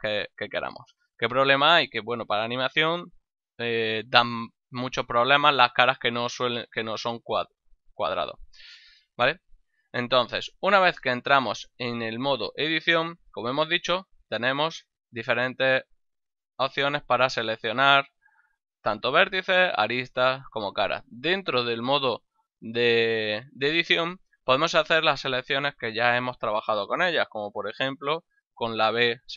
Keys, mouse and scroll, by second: 4.0 Tab, 5.8 right click, 6.2 Tab, 14.3 ctrl+Tab, 14.9 click, 15.8 right click, 28.2 b, 28.7 click.